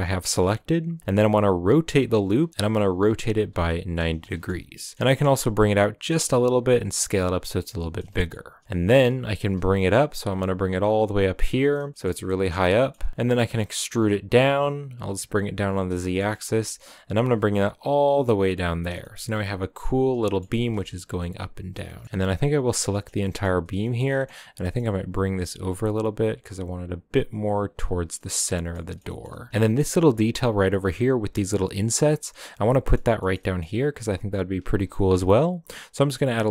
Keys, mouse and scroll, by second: 4.2 middle click, 5.0 g, 6.5 s, 7.6-8.6 scroll down 3, 7.8 middle click, 8.1 shift+middle click, 8.6 middle click, 8.8 g, 11.7 shift+middle click, 12.1 scroll up 4, 12.5-13.3 middle drag, 13.3 e, 15.7 shift+middle click, 16.3 scroll down 1, 16.4 g, 18.6 scroll down 2, 18.8-20.5 shift+middle drag, 20.5 g, 21.2 middle click, 22.0 3, 22.7 l, 22.9-24.0 middle drag, 24.0-24.5 scroll up 2, 24.2 middle click, 24.5 g, 27.9 scroll down 5, 28.1-29.2 middle drag, 29.2-30.0 scroll up 5, 29.6 shift+middle drag, 30.0 a, 30.5 right click, 30.9 right click, 31.3 shift+right click, 31.9 scroll down 3, 32.1-33.6 shift+middle drag, 33.6-34.8 scroll up 1, 34.8 ctrl+r.